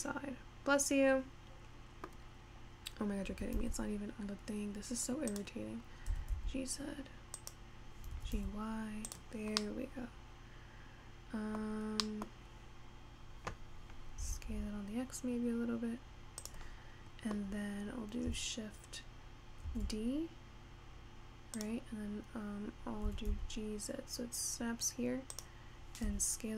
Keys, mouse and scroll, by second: 2.3-3.1 scroll up 1, 3.1 scroll down 1, 3.3 g, 6.1 scroll down 1, 6.3 g, 8.7 g, 10.5-13.0 middle drag, 13.0-14.3 scroll down 2, 14.3 s, 17.1-18.4 scroll down 1, 18.4-20.1 scroll up 5, 20.1 shift+d, 23.4 g, 26.4 s.